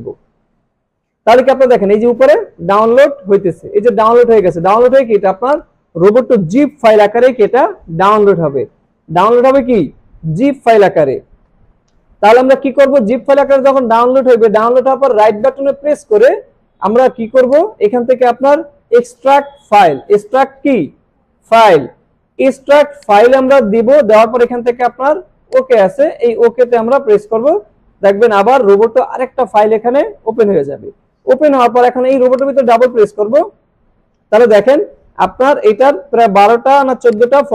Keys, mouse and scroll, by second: 5.5 click, 7.8 click, 15.2 right click, 17.5 click, 23.0 click, 25.6-26.2 drag, 32.1 click, 37.1-37.5 drag.